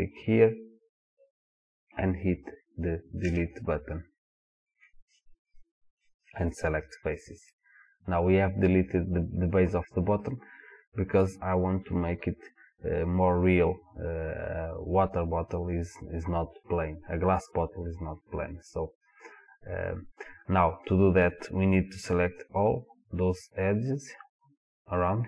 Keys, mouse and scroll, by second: 3.2 Delete, 7.5-25.2 middle drag.